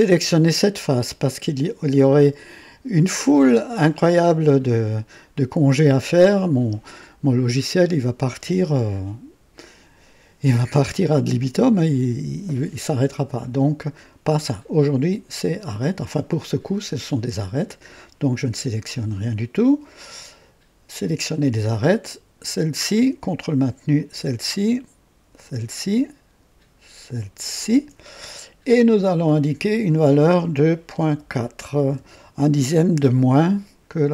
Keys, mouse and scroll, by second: 17.7 click, 22.4 click, 23.9 ctrl+click, 25.4 ctrl+click, 27.4 ctrl+click, 29.2 click, 31.0 ,, 31.3 ,, 31.9 KP_4.